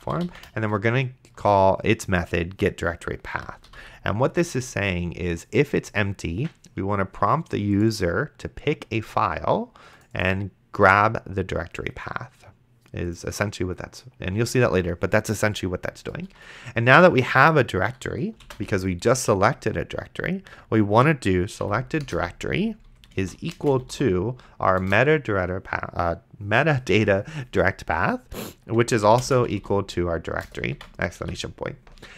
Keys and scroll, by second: 0.0-1.0 typing, 1.4 Return, 3.3 End, 3.7 ;, 16.6 Return, 18.7 shift+-, 21.6 Down, 22.1 Return, 23.0-24.4 typing, 24.8 Return, 28.8-31.7 typing, 30.5 Return.